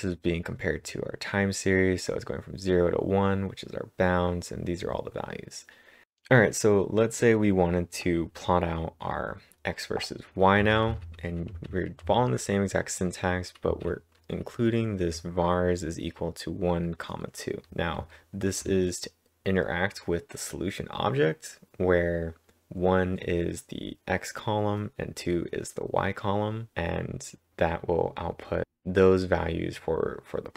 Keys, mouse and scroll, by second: 10.6-12.1 typing, 15.8 typing, 17.6-18.5 typing.